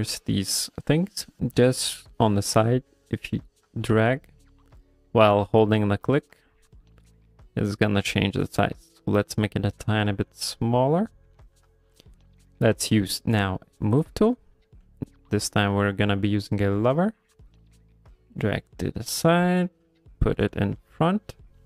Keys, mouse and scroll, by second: 3.1 click, 13.0 click, 15.2 click, 17.8 middle click, 19.3 click.